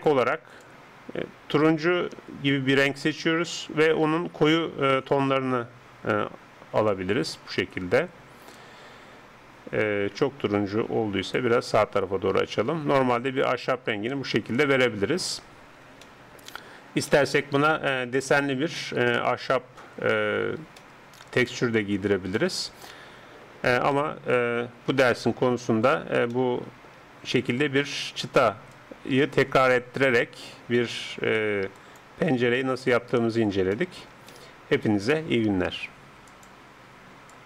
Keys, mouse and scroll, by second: 12.4 middle click, 17.1-24.3 middle drag, 24.9 KP_7, 28.7-30.6 drag, 30.8-32.7 drag, 32.7-37.4 middle drag.